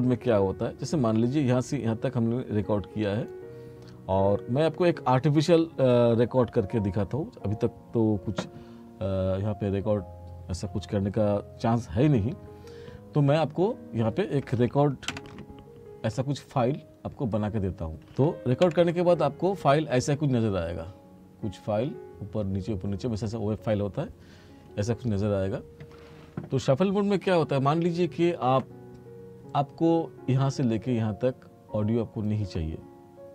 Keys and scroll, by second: 15.1 Page_Down, 18.7 Page_Down.